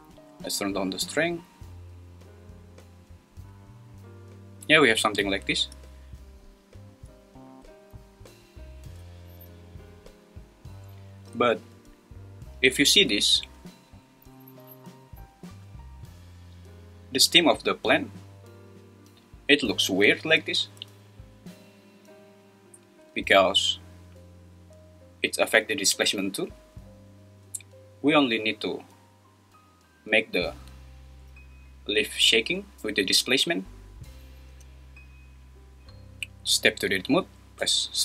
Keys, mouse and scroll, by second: 0.6-3.5 drag, 34.5 space, 36.5 Tab, 37.6 /.